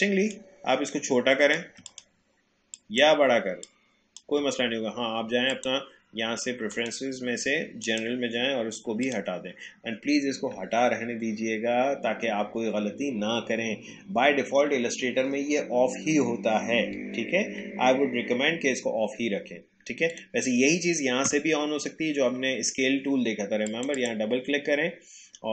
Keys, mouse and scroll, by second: 0.3-1.8 shift+drag, 3.6-5.5 shift+drag, 20.2 click, 23.7 click.